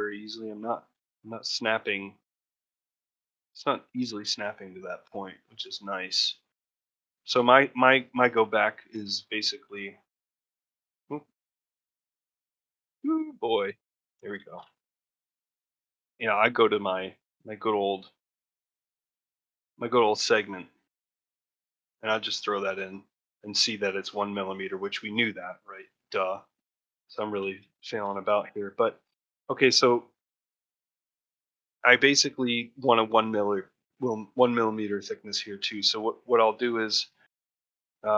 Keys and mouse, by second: 1.0-7.3 middle drag, 7.3 Escape, 7.5 Tab, 8.0-9.6 alt+middle drag, 9.8-14.1 middle drag, 14.3 ctrl+middle click, 14.5 shift+middle click, 18.8 click, 19.3 shift+middle click, 19.9 shift+click, 27.2 shift+middle click, 27.8 middle click.